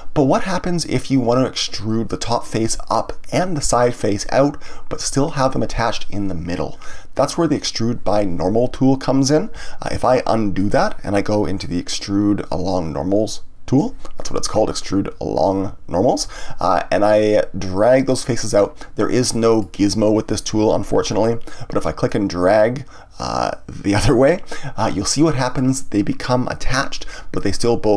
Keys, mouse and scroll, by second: 7.6-9.7 middle drag, 10.0 ctrl+z, 11.6-14.6 drag, 19.2-22.0 middle drag, 22.0 click.